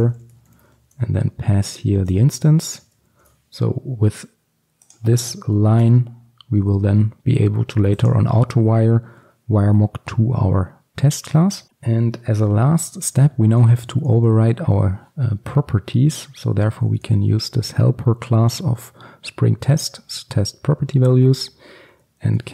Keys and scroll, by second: 3.0 Return, 3.2 ctrl+alt+super+l, 21.4 Return.